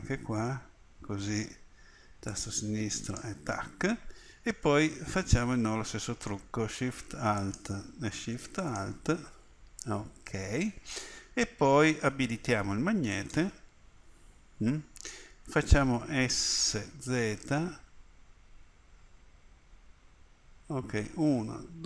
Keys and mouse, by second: 7.3-12.9 middle drag, 13.1-16.6 middle drag, 16.6 s.